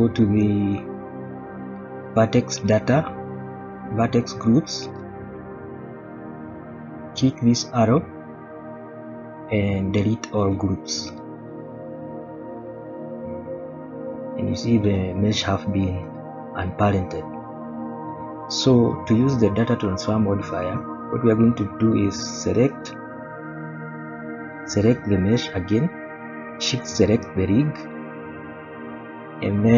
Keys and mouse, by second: 6.0-10.6 drag, 12.5 click, 13.8 g, 14.9-15.6 drag, 16.0 shift+middle drag, 17.2 middle click, 18.1 shift+middle drag, 18.6 middle click.